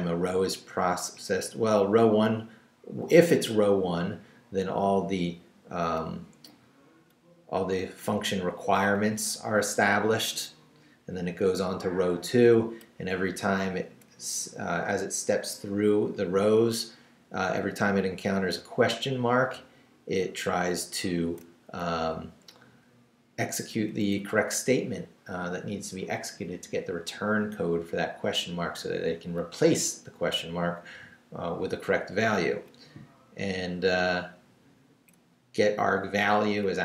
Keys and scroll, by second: 0.3 Up, 4.2 Down, 6.3 Down, 7.8 Up, 10.7 Down, 13.3 Up, 17.4 Down, 18.8 Down, 20.4 Up, 22.2 Up, 23.7 Up, 24.2 Down, 27.8 Down, 30.0 Down, 31.7 Down, 33.6 Up, 35.5 Down.